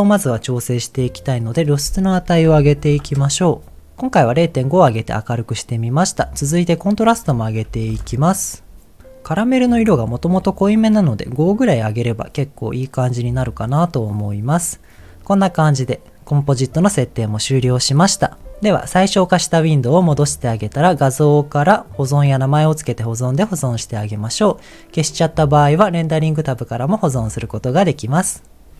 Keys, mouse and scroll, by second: 1.5-6.0 drag, 6.0 middle click, 6.9-8.0 drag, 14.9-15.2 scroll down 2, 15.2 middle click, 26.2 click.